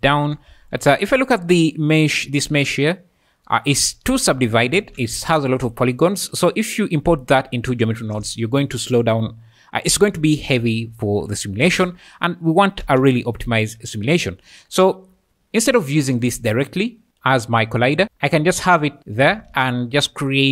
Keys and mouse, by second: 0.1-5.8 typing, 7.8 `, 10.9 `, 11.6 space, 12.8 space, 14.9 `, 16.3 click, 19.5 shift+a.